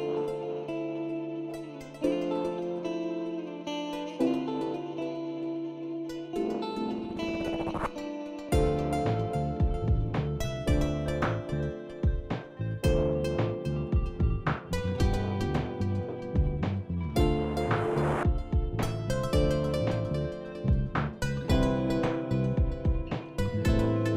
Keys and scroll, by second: 7.2 9, 7.4 Return.